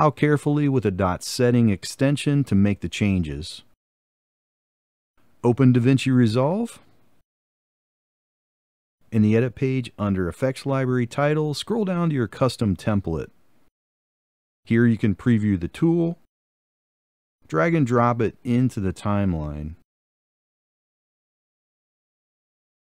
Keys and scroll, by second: 0.0-6.7 typing.